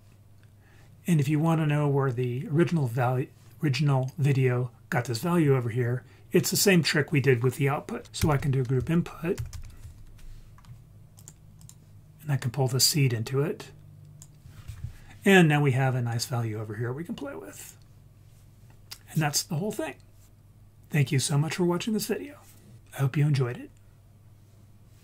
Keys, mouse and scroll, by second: 1.7 scroll down 2, 2.5-4.0 scroll down 1, 4.0-5.6 scroll down 1, 5.8-6.5 scroll up 1, 6.5 click, 6.5 scroll up 1, 8.0 shift+a, 8.2 shift+a, 12.9-14.2 drag, 16.2-17.7 drag.